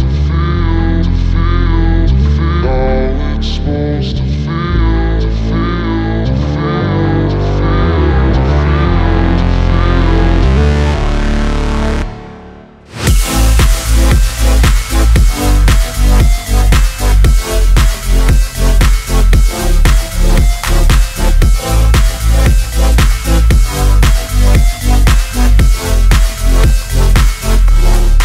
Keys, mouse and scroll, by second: 1.0-9.3 drag, 9.9 click, 13.5 click, 14.1 scroll up 1, 14.9 click, 15.2 scroll down 1, 16.2 ctrl+a, 16.9 click, 20.8 click, 22.3 r, 24.1 click, 24.9 p, 25.3 p, 26.1 click, 26.6 c, 26.8-28.2 drag.